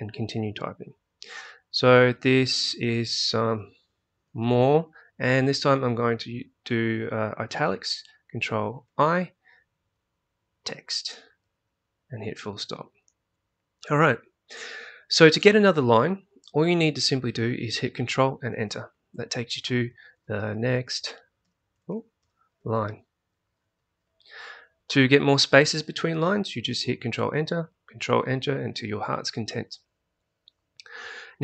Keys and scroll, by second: 1.8-4.9 typing, 8.8 ctrl+i, 10.3-12.4 typing, 18.4 ctrl+Return, 19.8-23.7 typing, 27.2 ctrl+Return, 28.1 ctrl+Return.